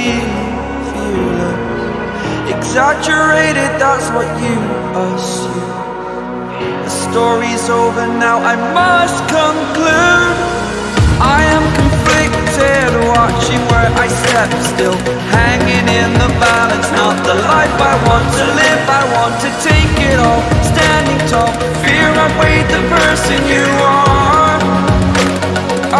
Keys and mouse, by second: 0.1 click, 2.7 Return, 4.5 click, 6.0 click, 6.9 click, 8.0 ctrl+z, 8.7 click, 8.8 right click, 9.5-10.6 drag, 10.7 click, 12.1 click, 12.9 click, 13.9 click, 15.6-16.6 drag, 18.7-21.3 typing, 22.1 click, 22.7 click, 24.4 click, 25.5 click.